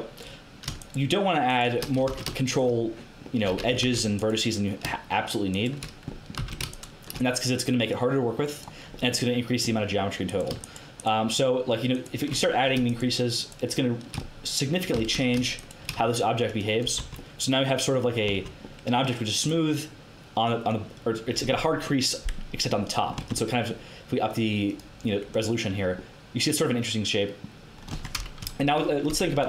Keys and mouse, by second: 0.8 right click, 1.6 right click, 2.0 ctrl+z, 3.8 ctrl+z, 6.3 ctrl+z, 12.9 shift+right click, 14.9 ctrl+z, 17.0 Tab, 18.2 Tab, 21.9-23.1 middle drag, 23.1 Tab, 24.6-26.1 drag, 27.9 Tab, 28.3 KP_1, 29.0 a.